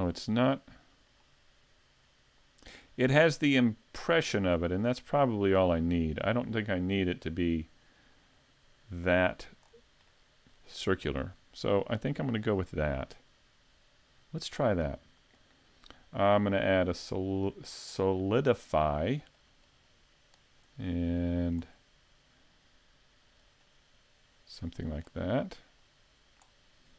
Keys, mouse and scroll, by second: 0.1 middle click, 4.5-5.0 scroll up 4, 5.0 middle click, 9.7-10.1 scroll down 2, 10.1 middle click, 15.4 click, 16.0 click, 19.4 click, 20.9 middle click, 21.8-22.4 scroll up 3, 23.4 click, 25.1 scroll down 1, 25.4 middle click.